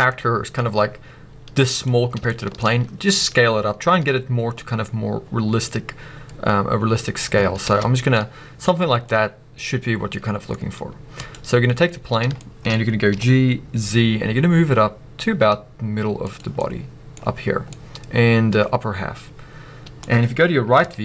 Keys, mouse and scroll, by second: 0.0 click, 0.3-0.6 scroll up 1, 0.6 s, 1.8 click, 2.0 scroll up 1, 2.2 shift+middle click, 2.6-5.0 scroll up 1, 6.7-11.1 middle drag, 7.7 ctrl+z, 8.0-9.0 scroll down 2, 11.1 click, 12.1 scroll up 2, 12.3-16.2 shift+middle drag, 13.0 g, 16.3 click, 16.7-21.0 middle drag, 20.8 KP_3.